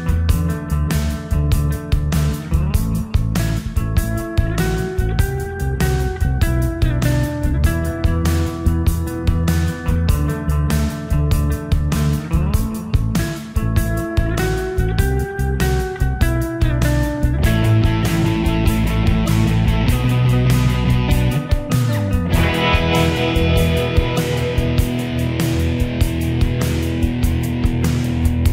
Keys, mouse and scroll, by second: 0.9-3.2 alt+drag, 3.2 g, 4.0 shift+g, 4.3-7.9 shift+drag, 7.9-11.5 drag, 12.2 right click, 15.9-18.1 shift+drag, 18.1 shift+c, 19.0 Escape, 19.4-25.1 drag, 25.1 right click, 27.4 F12.